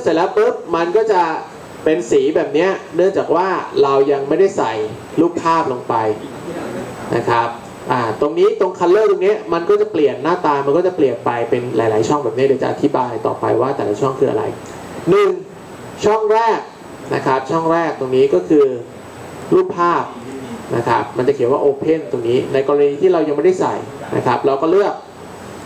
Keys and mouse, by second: 19.4-21.9 drag, 25.6 click.